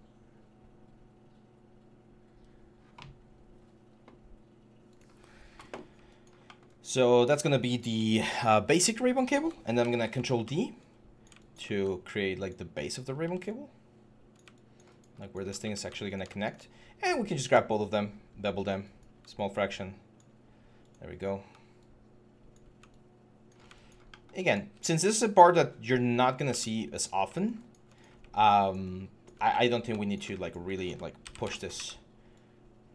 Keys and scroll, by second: 9.6 ctrl+d, 12.6 w, 24.4 w, 26.3 q, 31.0 ctrl+d, 31.5 w.